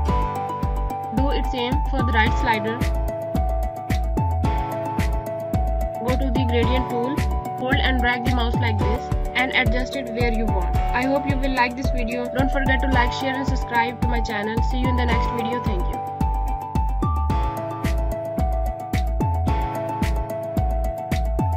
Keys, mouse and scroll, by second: 0.1 click, 2.5 click, 4.1 scroll up 1, 4.7 alt+click, 8.0 click, 13.4 click, 14.7 click.